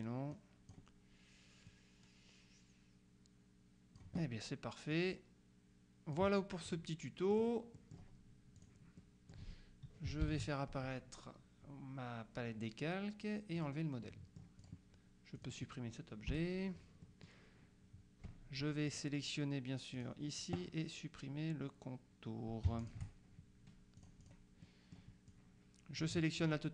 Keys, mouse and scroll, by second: 0.4 click, 1.8-4.6 drag, 5.0-6.7 drag, 7.4 click, 8.6 click, 10.3 ctrl+shift+l, 13.6 click, 14.7 click, 15.4 click, 16.4 Delete, 17.1 middle click, 19.0 click, 20.0 click, 22.9 shift+click, 24.0 click, 25.4 click.